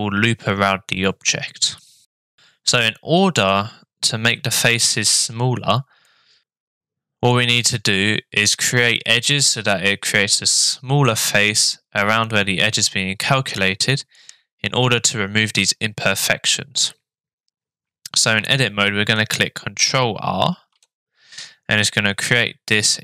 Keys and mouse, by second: 6.2-7.3 middle drag, 20.4 ctrl+r.